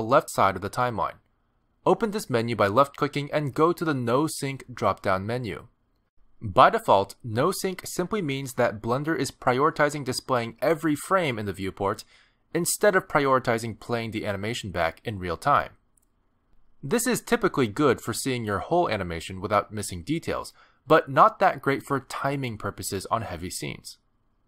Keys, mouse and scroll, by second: 1.6 click.